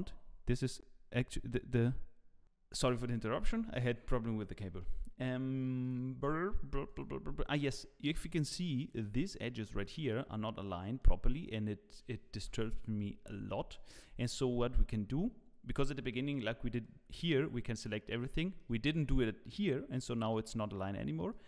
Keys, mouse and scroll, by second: 3.8-4.5 scroll up 1, 4.5 scroll up 1, 4.6 shift+middle click, 5.1-5.8 scroll up 1, 5.8 click, 6.8 click, 7.6 click, 8.8 shift+click, 12.5 middle click, 12.5 scroll down 4, 12.5 KP_1, 13.3 scroll up 2, 13.7 shift+middle click, 16.1 shift+middle click, 16.8 click, 18.4 shift+middle click, 18.9 click, 20.1 click, 21.3 click.